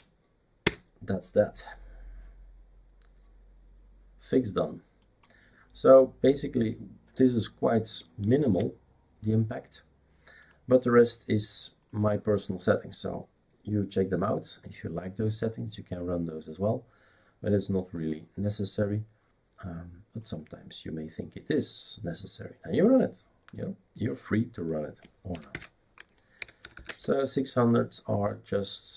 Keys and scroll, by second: 0.0-0.3 typing, 0.6 Return, 25.3-27.2 typing.